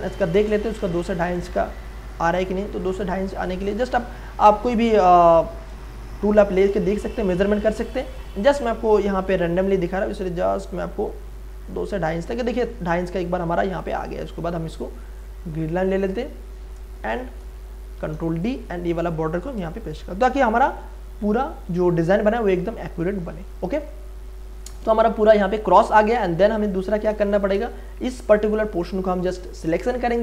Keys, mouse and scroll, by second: 0.2 m, 0.9-3.7 drag, 1.0 ctrl+e, 8.0 F8, 10.1-15.2 drag, 15.2-17.1 drag, 17.1 v, 17.9 ctrl+d, 18.4 click, 19.6 ctrl+space, 19.9 ctrl+click, 20.2 ctrl+space, 21.0 ctrl+space, 22.6 ctrl+click, 22.9 ctrl+space, 25.9 space, 26.1 ctrl+click, 27.6 m, 28.4 click, 29.5 space.